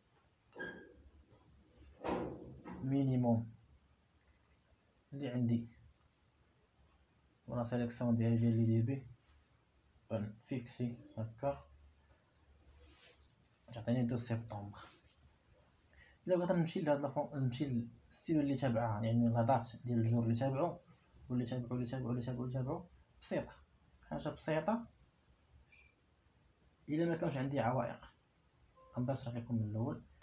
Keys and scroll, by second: 0.0-3.1 typing, 10.9 F4, 12.5 Return.